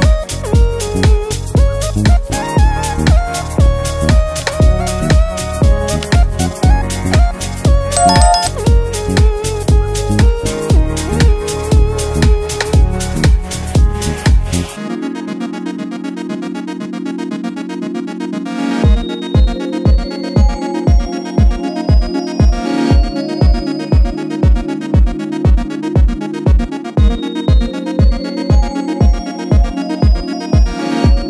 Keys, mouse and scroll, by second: 1.2-3.0 shift+drag, 7.3 ctrl+-, 8.3 space, 8.8 click, 8.9-9.4 space, 10.4 click, 13.4 shift+Num_Lock, 13.4 click, 13.9-15.5 alt+shift+drag, 16.5 z, 17.1-17.7 click, 18.1 space, 18.4 click, 18.6-19.1 space, 19.7 click, 24.2 shift+Num_Lock, 24.2 click, 25.7-27.3 alt+shift+drag.